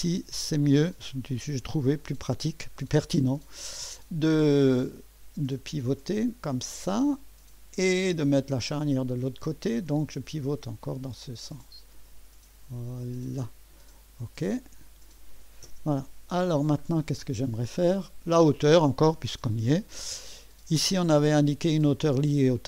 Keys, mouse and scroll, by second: 2.9 click, 4.5-7.7 drag, 8.1-9.7 drag, 10.8-13.4 drag, 14.5 click, 15.7 0, 16.5-16.9 scroll up 1, 17.0-17.7 scroll down 1, 17.7 click, 20.4 click.